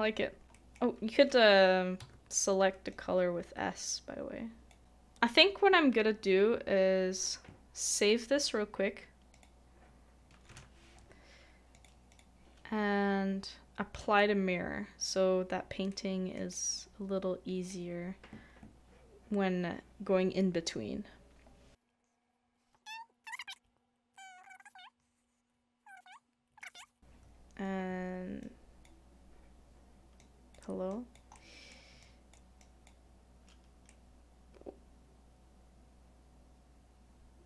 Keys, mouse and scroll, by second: 0.5 shift+middle click, 2.0 middle click, 4.8 shift+middle click, 10.4 shift+middle click, 10.5 BackSpace, 12.1 2, 12.1 double click, 15.9 double click, 31.3 5, 31.3 middle click, 33.8 middle click.